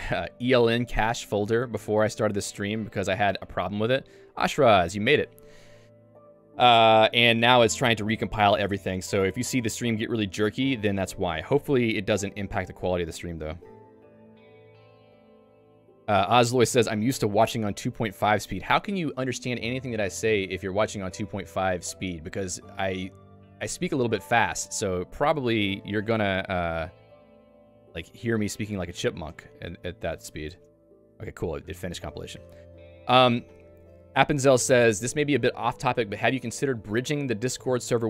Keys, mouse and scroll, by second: 3.7 j, 29.5 ctrl+alt+u, 30.5 Return, 32.2 Return.